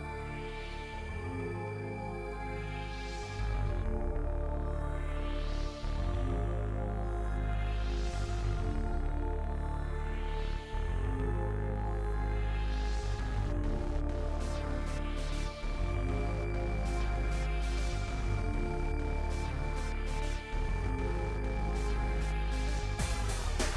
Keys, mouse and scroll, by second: 0.0 click, 0.9 s, 1.2 middle click, 1.5 KP_1, 2.2 g, 2.9-3.3 scroll up 7, 3.0 shift+middle click, 3.3 shift+middle click, 3.5 g, 4.4 middle click, 4.6 scroll down 3, 4.7 middle click, 5.0 click, 5.2-5.6 scroll up 3, 5.6 alt+click, 5.9 middle click, 6.1 scroll up 1, 6.4 e, 7.4 g, 8.1 e, 9.9 e, 11.1 g, 11.8 e, 13.4 e, 14.1 g, 15.0 z, 15.8 middle click, 16.0 f, 16.2 middle click, 16.3 scroll down 7, 16.6 KP_7, 16.8 shift+middle click, 17.4 middle click, 18.0 KP_1, 18.2 scroll up 3, 18.4 KP_Decimal, 18.6 scroll down 10, 18.8-19.8 shift+middle drag, 19.8-20.2 KP_Add, 20.4 middle click, 20.7 click, 21.3 KP_7, 21.7 click, 21.8 shift+middle click, 21.9 scroll down 4, 22.2 shift+middle click, 22.7 g, 23.6 shift+middle click, 23.7 scroll up 6.